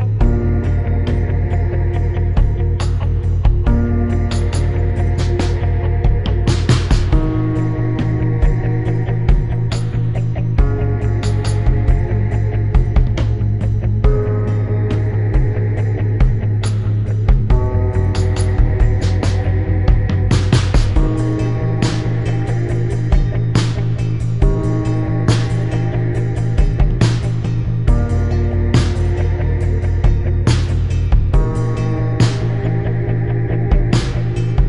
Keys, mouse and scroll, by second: 1.0 click, 8.2 right click, 9.8 click, 10.1 click, 10.1 right click, 10.5 click, 13.7 click, 14.4 click, 14.9 click, 15.1 right click, 15.9 click, 15.9 right click, 17.6 click, 19.1 click, 19.8 right click, 22.2 click, 22.2 right click, 23.4 click, 23.7 click, 25.6 shift+click, 27.7 shift+click, 28.9 shift+click, 32.2 click.